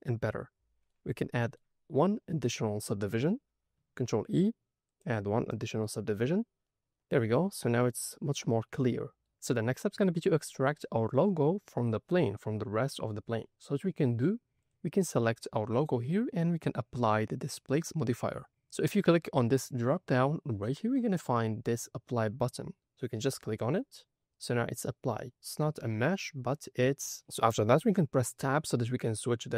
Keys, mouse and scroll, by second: 0.3 middle click, 1.1-1.5 middle drag, 2.9 Tab, 3.9 ctrl+e, 6.1 Tab, 6.6 middle click, 7.4 alt+a, 7.6 middle click, 8.9 middle drag, 14.6 click, 15.0 click, 20.6-23.7 drag, 25.1 middle click, 28.6 Tab.